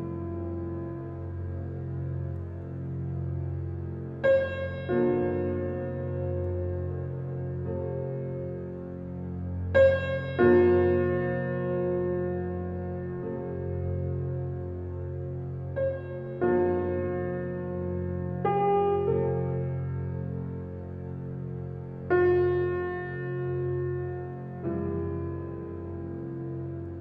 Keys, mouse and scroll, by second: 0.1 alt+click, 0.6 alt+right click, 0.8 alt+middle click, 1.2 alt+right click, 1.5-3.0 alt+drag, 3.0 alt+right click, 3.2 alt+click, 3.5 alt+middle click, 3.9 alt+right click, 4.7 alt+click, 5.7 alt+click, 6.1 alt+right click, 6.9 alt+click, 7.9-8.3 typing, 8.7 click, 9.4 alt+right click, 9.9 click, 10.8-14.1 right drag, 14.1 click, 15.6 scroll up 1, 16.9 click, 24.5 click.